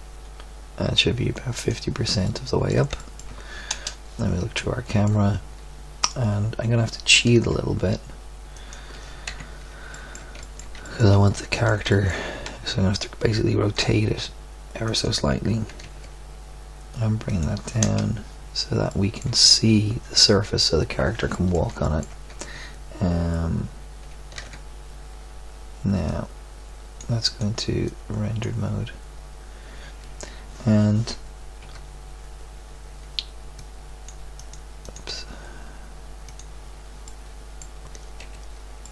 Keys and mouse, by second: 3.7 KP_0, 6.8 middle click, 7.1 g, 9.2 KP_3, 9.9 middle click, 13.7 r, 15.6 g, 17.8 KP_0, 24.3 alt+z, 31.7 Tab, 34.1 Tab, 38.2 KP_Decimal.